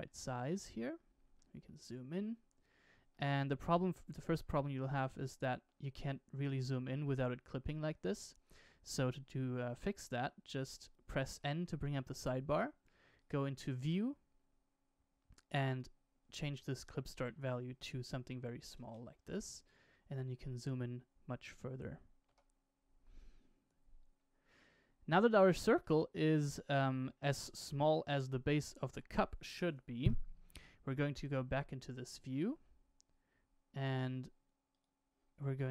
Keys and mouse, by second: 0.0-0.5 shift+middle drag, 1.4 shift+middle drag, 3.1-3.8 shift+middle drag, 4.2-5.6 middle drag, 10.4 click, 11.3 n, 13.0 click, 15.6-19.4 drag, 17.0 Left, 17.3 Right, 18.2 KP_0, 18.3 KP_0, 22.2 n, 25.1-25.5 shift+middle drag, 25.8-26.5 middle drag, 30.8 KP_1, 31.9-32.4 shift+middle drag, 34.7 click.